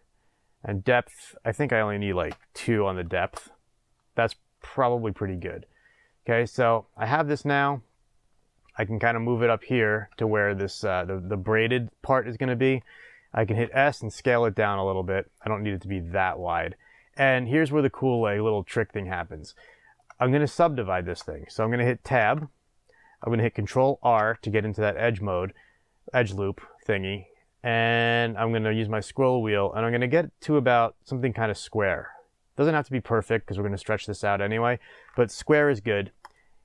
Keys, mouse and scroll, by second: 1.1-5.3 drag, 3.3 Return, 6.5 click, 7.6-9.7 drag, 10.1 shift+middle drag, 10.9 scroll up 1, 13.6 s, 14.5-15.8 middle drag, 16.3-19.6 drag, 19.6-24.3 shift+middle drag, 20.1-20.6 scroll up 2, 22.1 Tab, 24.1 ctrl+r.